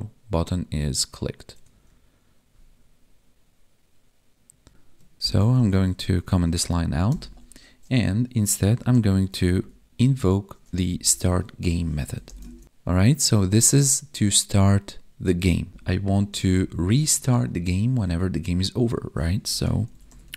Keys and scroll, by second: 4.7 Escape, 5.2 ctrl+/, 5.5 ctrl+s, 10.9 Down, 11.0 Tab, 12.0 Right, 12.5 ctrl+s, 15.6 Down, 16.6 ctrl+/.